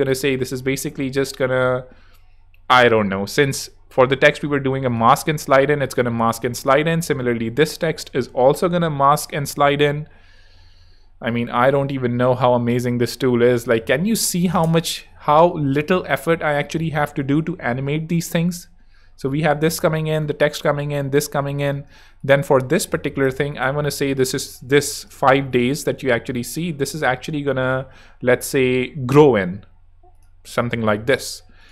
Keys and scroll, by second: 13.5-16.5 typing, 16.6 Return, 18.3 space, 21.7 space.